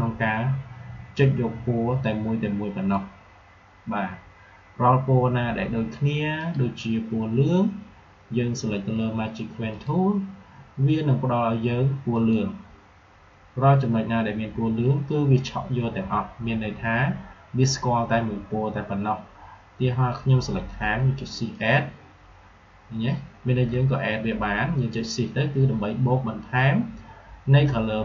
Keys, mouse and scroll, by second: 9.6 click, 12.0 click, 20.8 shift+Num_Lock, 20.8 click, 21.4 shift+click.